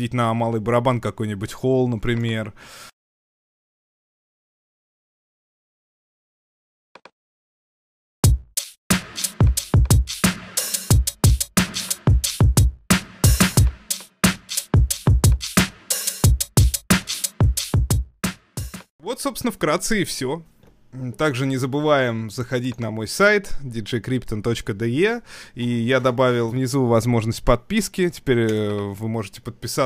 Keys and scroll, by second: 8.1 Home, 20.6 super+Tab.